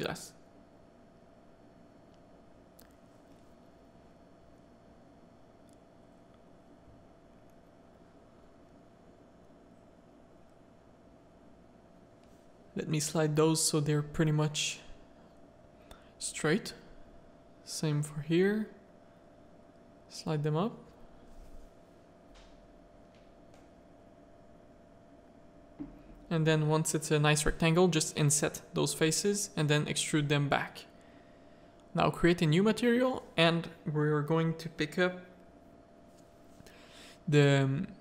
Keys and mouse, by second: 1.6-3.7 middle drag, 4.5 z, 5.1 Tab, 5.3 middle click, 5.8 z, 6.0 middle click, 6.6 z, 6.8 middle click, 7.4 1, 8.0 click, 9.1 click, 9.5 middle click, 10.0 g, 11.9 middle click, 12.2 g, 13.9 middle click, 15.1 middle click, 16.1 click, 16.7 g, 18.1 click, 18.8 g, 20.3 click, 21.1 g, 22.4 middle click, 22.9 3, 23.5 click, 24.4 middle click, 25.4 i, 27.6 click, 28.2 e, 29.6 click, 29.9 z, 32.4 click, 33.5 click, 37.4 middle click.